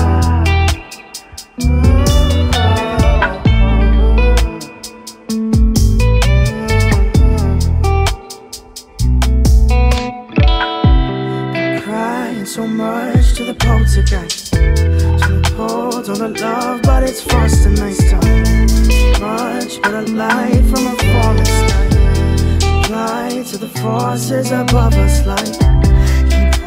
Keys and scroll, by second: 0.4 ctrl+w.